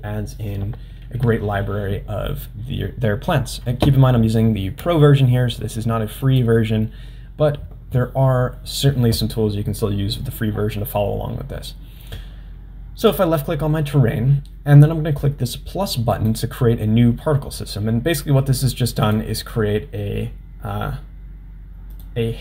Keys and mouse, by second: 6.3 click, 13.0 click, 16.1 click, 19.1-22.4 drag.